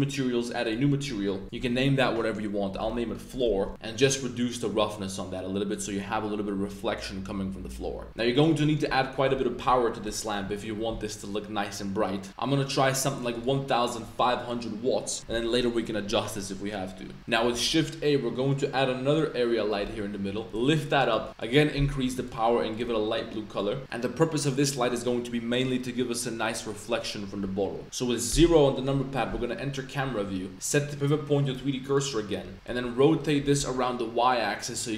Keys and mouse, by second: 0.6 click, 1.4-3.7 drag, 3.2 l, 3.7 o, 4.0-5.7 drag, 8.1 2, 8.4-11.2 drag, 12.3 5, 13.3-14.4 drag, 17.5 shift+a, 20.4 g, 20.8 z, 21.0 click, 21.4 click, 28.2 KP_0, 30.8-31.9 drag, 32.5 r, 33.0 x, 33.1 click, 33.3 r, 33.5 y.